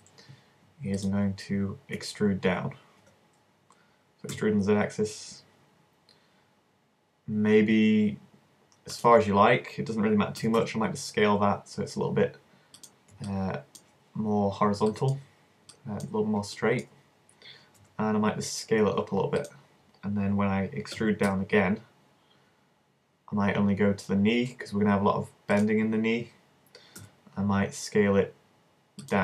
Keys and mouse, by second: 0.2-2.0 middle drag, 2.0-3.0 drag, 2.0 w, 3.0 e, 3.8-6.2 middle drag, 7.4-10.6 drag, 7.4-9.0 right drag, 10.4 s, 13.3-14.8 middle drag, 17.8 alt+s, 19.5-21.4 drag, 21.0 e, 25.6-27.5 drag, 27.0 s, 27.5-29.0 middle drag, 29.1-29.2 drag.